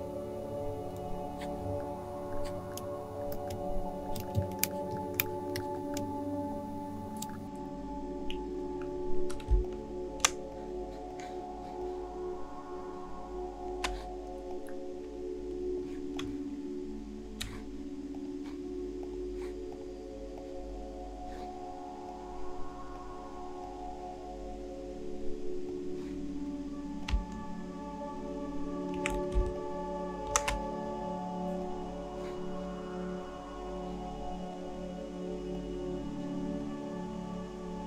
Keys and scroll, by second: 4.3 shift+space, 9.5 space, 29.3 alt+shift+space.